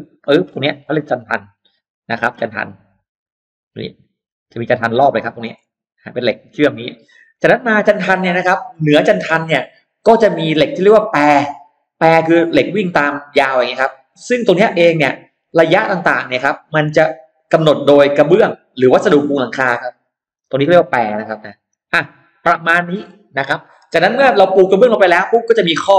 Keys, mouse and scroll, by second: 0.4 click, 1.0 click, 1.8 click, 2.4 click, 3.0 click, 3.4 click, 4.0 click, 4.5 click, 5.2 click, 5.9 click, 6.4 click, 11.9-13.1 drag, 13.6-14.8 drag, 15.4 click, 17.0-18.0 drag, 18.6 click, 20.2 click, 21.0 click, 21.5 click, 21.9 click, 25.4 click.